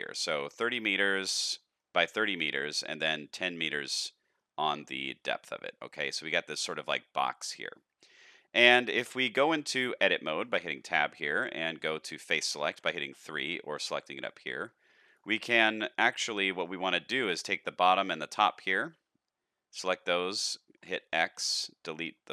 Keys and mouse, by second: 1.5 middle click, 3.5-4.3 middle drag, 5.8-7.1 middle drag, 8.1-8.5 middle drag, 8.7 shift+middle drag, 10.4 Tab, 13.0 3, 14.3 shift+middle click, 15.5 middle click, 16.1 click, 16.5 shift+middle click, 17.2 middle click, 17.9 middle click, 18.8 x, 20.6 middle click.